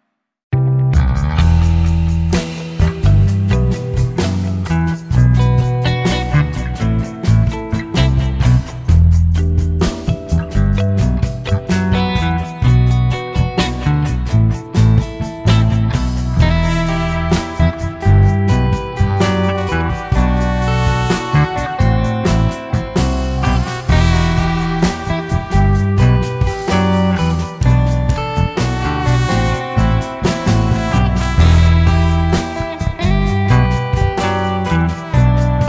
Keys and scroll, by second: 0.0-0.6 typing, 0.7 Escape, 2.5 Escape, 5.9 Escape, 6.8 Escape, 6.9 Escape, 11.9 Escape, 15.7 Escape, 15.8 Escape, 19.0 e, 19.1 space, 19.5 e, 19.7 space, 21.4-22.2 Escape, 25.5 Escape, 25.5-26.4 typing, 26.5 Escape, 27.9-28.9 typing, 29.2 Escape, 31.2 Escape.